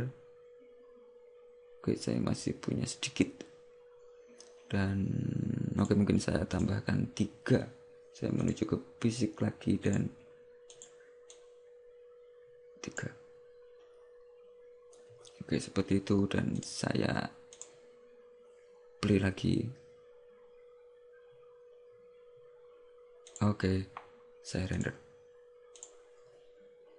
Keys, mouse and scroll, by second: 6.7 click, 8.6 click, 10.0 click, 16.6 click, 23.5 click, 24.8 click.